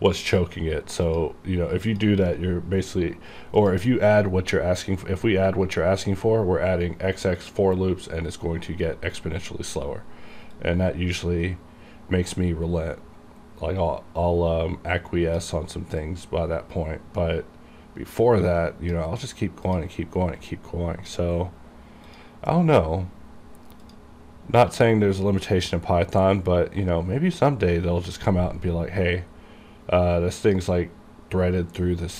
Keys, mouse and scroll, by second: 4.2-4.9 scroll down 1, 7.5 click, 9.2-10.4 scroll down 1, 10.7-16.1 drag, 16.1-19.8 drag, 20.3 scroll down 1, 22.1 click, 24.4-25.6 scroll down 1, 30.5 click.